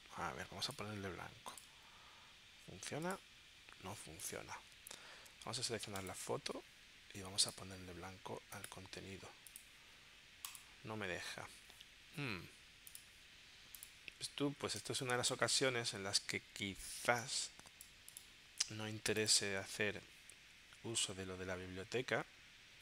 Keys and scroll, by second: 14.8 space.